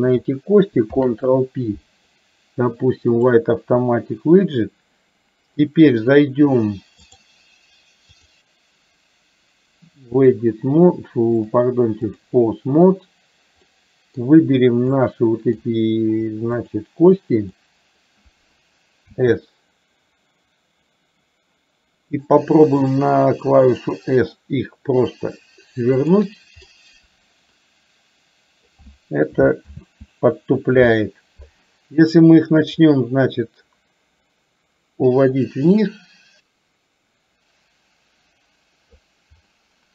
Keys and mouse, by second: 0.9 ctrl+p, 7.0 click, 8.3-10.4 drag, 11.4-12.7 drag, 13.8-14.3 middle drag, 15.0-15.8 middle drag, 17.5-18.2 middle drag, 26.9-28.8 middle drag, 30.0 ctrl+z, 32.8-39.4 drag, 39.5-39.9 middle drag.